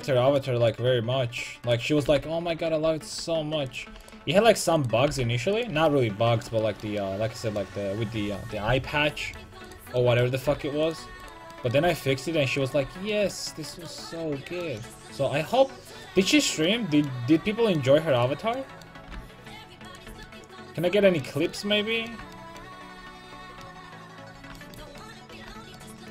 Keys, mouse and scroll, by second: 1.6-3.7 right drag, 2.0 g, 3.9 a, 4.0 right click, 4.3-7.0 middle drag, 5.1 g, 5.7 a, 9.7 right click, 10.5 g, 10.9 click, 10.9 right click, 11.1 a, 11.8 g, 12.8 a, 18.2 right click, 19.1 g, 20.1 a, 24.3 middle click, 25.2-26.1 middle drag.